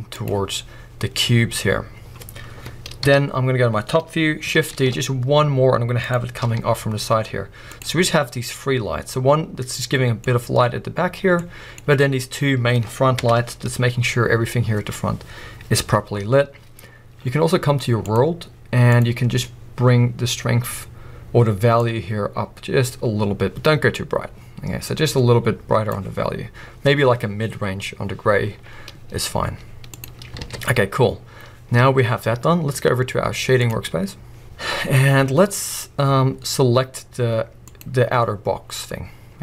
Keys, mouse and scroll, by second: 0.3 click, 3.0 KP_7, 3.9 scroll down 1, 4.8 shift+d, 6.1 click, 6.5 r, 7.8 click, 9.9-13.4 middle drag, 13.2 KP_0, 14.0 scroll up 2, 16.5-18.1 scroll up 3, 16.8-18.1 middle drag, 18.1 click, 18.9-19.4 drag, 29.5 z, 30.4 alt+a, 30.9-31.4 scroll down 2, 34.0 click, 34.4 KP_0, 34.9-35.3 scroll down 1, 35.6 scroll up 1, 37.8 click, 38.6-39.4 scroll down 2.